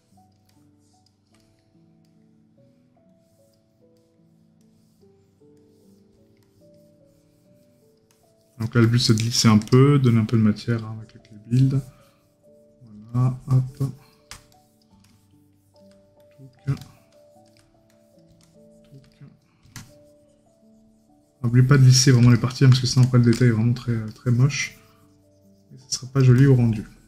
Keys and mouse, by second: 1.5 right click, 4.0 right click, 19.2 right click, 22.4 right click.